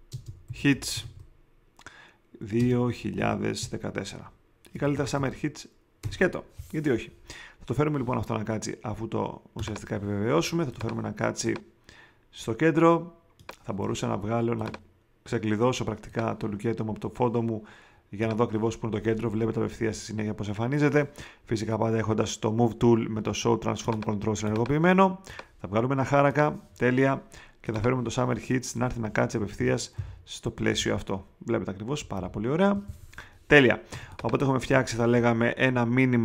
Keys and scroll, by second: 0.0-1.5 typing, 2.5 space, 3.0 2, 3.6 1, 4.7 BackSpace, 29.4 shift+Down, 31.6 Down, 32.1 shift+Left, 33.9 space.